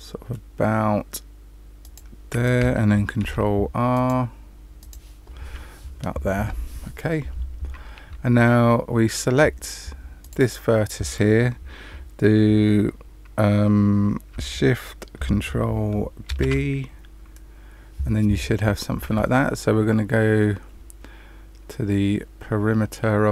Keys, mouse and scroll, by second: 3.2 ctrl+r, 10.2 click, 16.2 ctrl+shift+b.